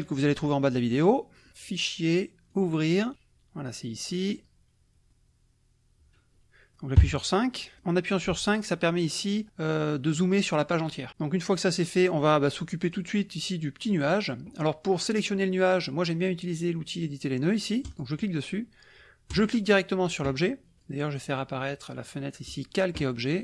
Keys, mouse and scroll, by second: 0.0 click, 1.6 click, 2.5 click, 4.3 click, 7.0 KP_5, 7.8 click, 8.3 z, 10.8 click, 12.9 click, 14.2-16.0 drag, 17.9 click, 19.5 click, 20.9 click, 22.5 click.